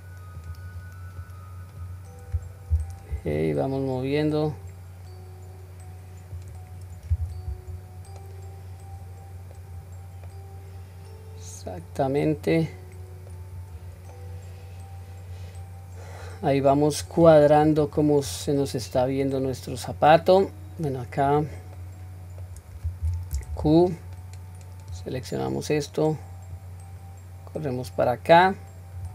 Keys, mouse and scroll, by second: 1.2-1.7 drag, 2.7 g, 7.7-9.7 scroll down 2, 8.2-9.7 middle drag, 9.8-10.2 scroll down 1, 10.3-13.5 middle drag, 14.1-17.0 middle drag, 18.3-18.9 scroll down 1, 18.9-19.7 scroll up 2, 19.4-21.5 middle drag, 21.7 middle click, 23.0 q, 23.8-24.9 drag, 26.6-29.0 drag.